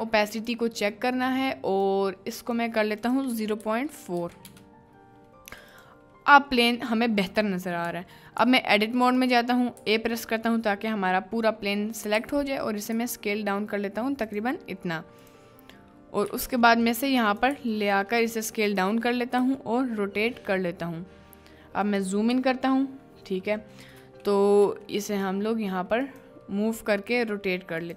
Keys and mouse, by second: 0.3 click, 1.8 click, 3.0-4.5 drag, 5.7 click, 7.9 Tab, 8.4 a, 9.0 right click, 9.8 a, 10.5 middle click, 12.1 s, 14.3 ctrl+click, 15.2 click, 16.2 g, 17.3 click, 17.5 s, 18.7 click, 19.4 r, 22.9-27.1 drag, 24.6 g, 27.1 r, 27.8 click.